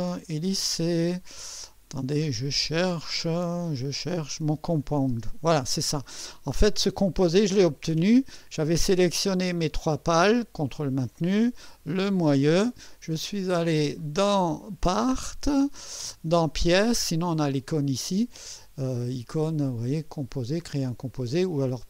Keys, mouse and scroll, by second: 2.2-2.5 scroll down 2, 4.7 click, 5.1 space, 6.9 click, 8.4 scroll down 2, 9.3 click, 10.6 ctrl+click, 11.2 ctrl+click, 12.1 ctrl+click, 14.0 click, 14.9 click, 19.6 click, 20.8 click.